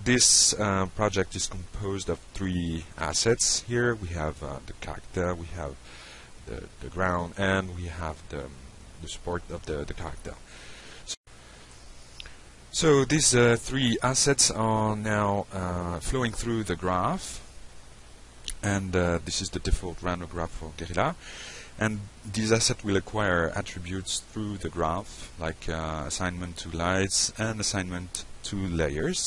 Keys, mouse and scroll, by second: 0.7 click, 5.3 click, 7.0 click, 8.8 click, 11.8 click, 14.2 click.